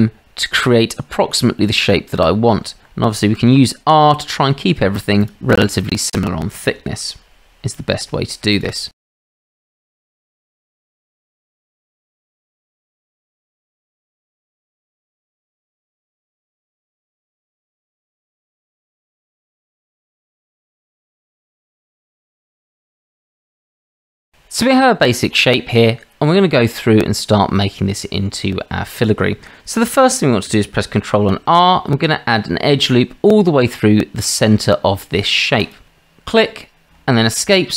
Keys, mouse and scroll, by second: 3.4 r, 5.7 click, 6.7 r, 9.2 e, 9.5 r, 10.8-12.4 typing, 13.4 e, 13.8 r, 14.1 click, 15.0-21.8 typing, 16.1 shift+click, 18.2 click, 18.8 drag, 22.8 click, 23.0 s, 31.3 ctrl+r.